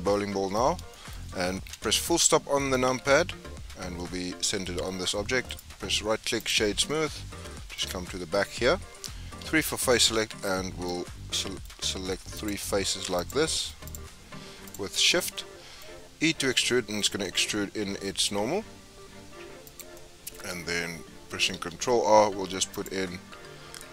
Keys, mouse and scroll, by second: 0.3-0.9 scroll up 6, 0.9-1.7 shift+middle drag, 1.7 KP_Decimal, 2.4-3.0 scroll down 7, 3.0-3.5 scroll up 4, 3.7 scroll down 3, 3.7-4.5 scroll up 6, 4.5 scroll down 3, 5.4-6.8 right drag, 6.8-8.0 middle drag, 8.0 Tab, 9.4 4, 9.6 3, 10.5 middle click, 10.9-11.3 scroll up 1, 11.3 middle click, 11.8-12.3 scroll up 1, 12.3 shift+click, 13.1 click, 13.8 shift+click, 14.6 shift+click, 15.1 scroll down 2, 15.3-17.1 middle drag, 17.1 e, 19.9 middle click, 20.4-21.5 scroll up 4, 21.5 ctrl+r.